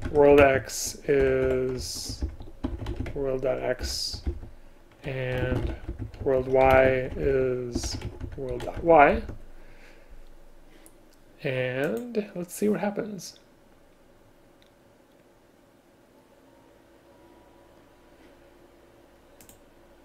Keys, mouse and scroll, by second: 0.4 shift+space, 1.3 Escape, 3.9 Return, 5.5 space, 6.8 shift+space.